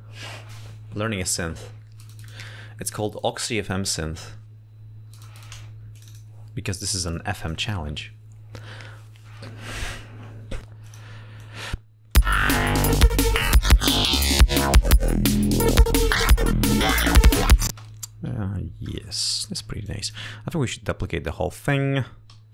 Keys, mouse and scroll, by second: 6.0 click, 7.2 click, 11.2-12.2 drag, 12.4 space, 15.8 ctrl+scroll down 2, 18.0 space, 18.6 g, 18.8 scroll up 2, 20.2 click, 21.8 scroll up 2.